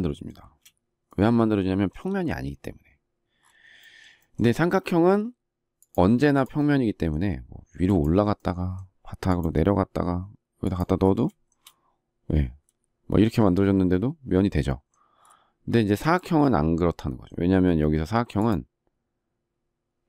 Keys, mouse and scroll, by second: 0.4 space, 11.2 shift+middle click, 15.8 shift+middle click.